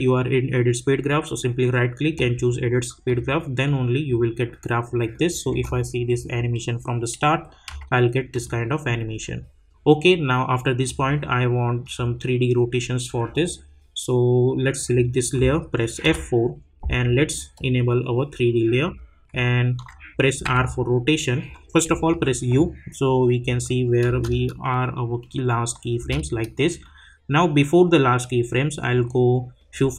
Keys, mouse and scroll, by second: 3.0-5.1 drag, 5.5 space, 7.8 space, 8.3-11.8 drag, 16.0 F4, 17.5 click, 20.4 r, 21.9-22.6 typing, 23.4 click, 24.3 space, 26.8-29.9 drag.